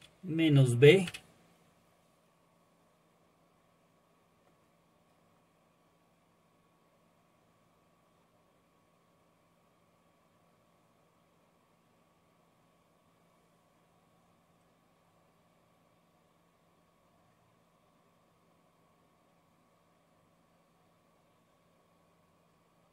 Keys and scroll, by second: 1.1 typing.